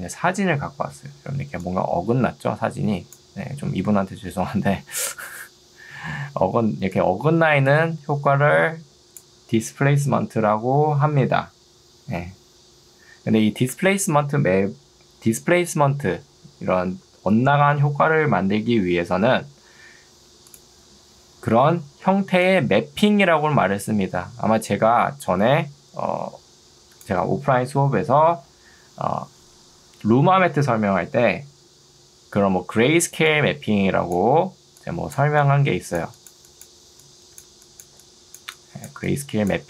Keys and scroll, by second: 1.3 ctrl+2, 5.1 Escape, 6.5 ctrl+2, 13.7 Escape, 21.7 ctrl+2.